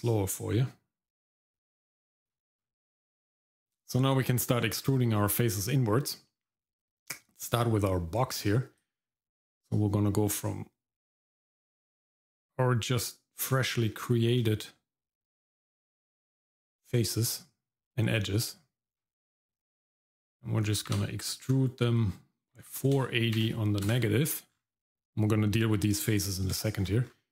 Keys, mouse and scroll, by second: 2.6-3.2 scroll up 2, 3.2 click, 3.2 middle click, 5.5 scroll up 1, 6.4-6.8 scroll up 1, 6.8 middle click, 8.8-13.5 drag, 15.2-16.8 shift+drag, 20.9 e, 24.5-26.5 scroll down 2, 26.6 shift+middle click, 27.0-27.3 scroll up 1.